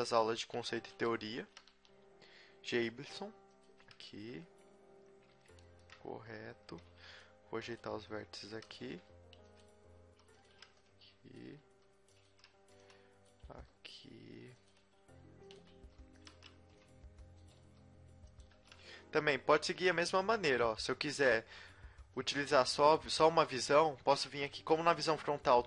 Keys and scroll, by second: 1.5 g, 1.7 g, 4.1 a, 6.5 z, 6.9 z, 7.1 b, 7.8 g, 8.9 r, 10.0-13.5 typing, 15.0 r, 15.7 g, 16.3 a, 16.5 b, 17.6 g, 18.6 a, 24.8 KP_1.